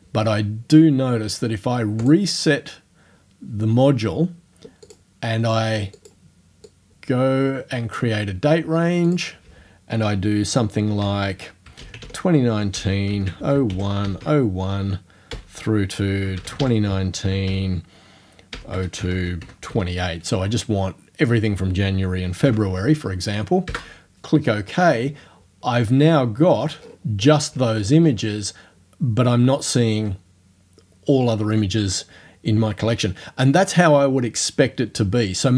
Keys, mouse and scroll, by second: 2.1 click, 4.9 click, 6.0 click, 6.7-8.1 drag, 8.1-9.1 middle drag, 9.1 click, 9.3 middle click, 11.1 middle click, 11.1-20.2 typing, 11.7 click, 22.5 ], 23.7 Return, 25.7-26.3 scroll down 2, 26.4-27.1 scroll down 2, 27.5-28.3 scroll up 4.